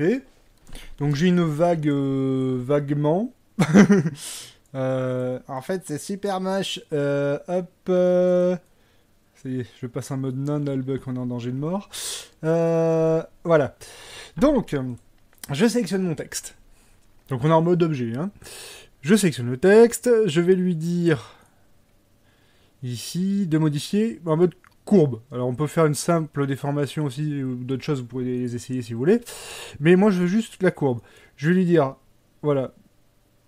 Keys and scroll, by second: 0.8 Tab, 2.6 Tab, 13.1 Tab.